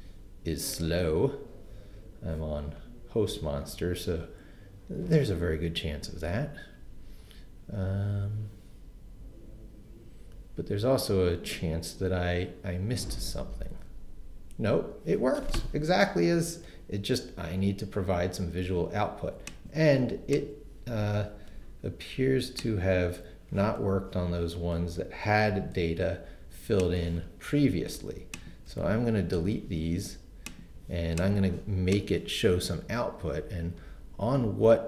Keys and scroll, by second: 23.9 super+r, 25.7 super+r, 29.3 shift+BackSpace.